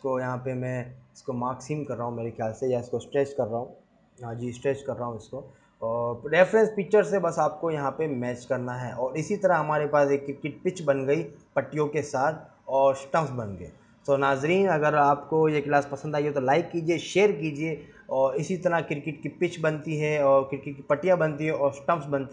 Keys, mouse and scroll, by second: 0.1 click, 0.4 click, 0.6 g, 2.6 click, 2.8 scroll up 2, 3.2 3, 3.3 click, 3.5 click, 4.3 scroll down 2, 4.5 g, 5.5-5.8 scroll down 6, 5.6 Tab, 7.2 click, 9.2 click, 9.3 scroll up 2, 9.5 click, 10.9 scroll down 3, 11.5-12.0 scroll up 9, 13.2 click, 13.6 KP_Decimal, 13.9 scroll down 1, 14.0 scroll up 5, 14.2 scroll down 2, 14.3 click, 14.7-15.3 scroll up 7, 15.3 q.